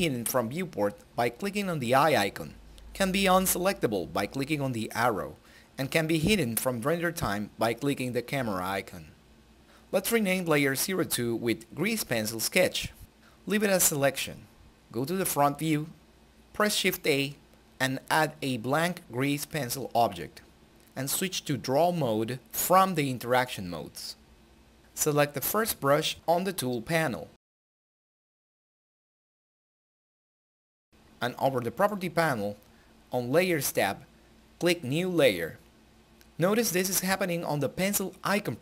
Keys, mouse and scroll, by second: 4.7 click, 6.2 space, 7.3-11.1 typing, 11.5 Return, 16.1 Return, 16.3 shift+a, 19.0 click, 21.4 click, 34.7 click, 37.9-38.4 typing.